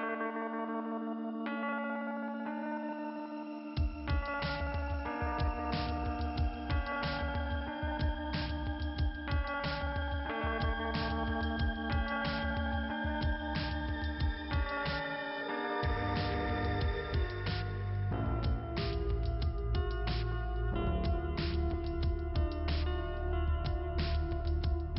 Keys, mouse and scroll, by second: 1.3 click, 5.4 middle click, 23.2-24.0 scroll down 1, 24.7 click.